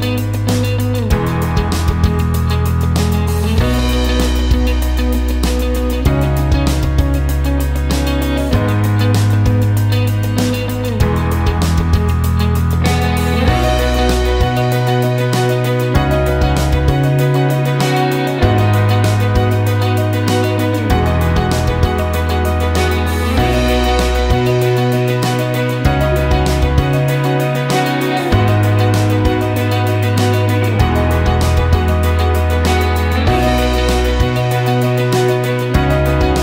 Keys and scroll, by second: 0.6 shift+F2, 1.9 F3, 17.6-18.4 typing, 30.1 ctrl+shift+z.